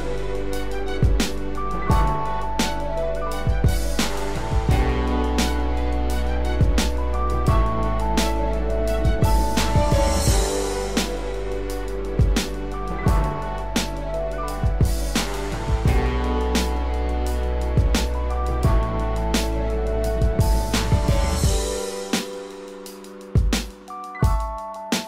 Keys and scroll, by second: 8.1 ctrl+z, 10.0 ctrl+alt+z, 17.4 ctrl+alt+z, 20.9 ctrl+=, 23.3 ctrl+-.